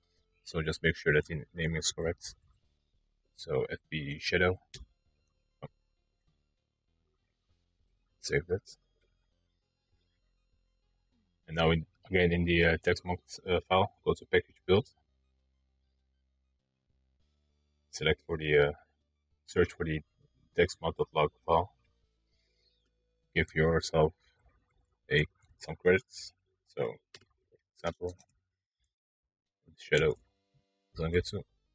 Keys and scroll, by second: 0.7-2.0 typing, 3.7 Return, 5.1 BackSpace, 6.7 ctrl+s, 22.8-24.3 typing, 27.3-28.7 typing, 30.1 typing.